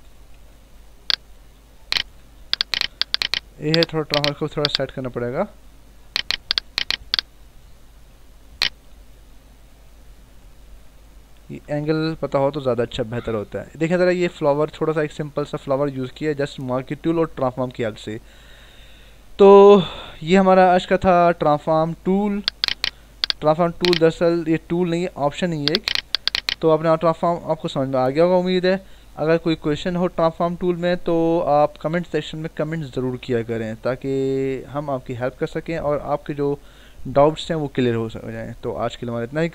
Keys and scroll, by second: 2.5 Return, 3.6 ctrl+t, 8.9 Left, 9.5 Up, 9.9 Right, 10.6 Up, 11.6 Return.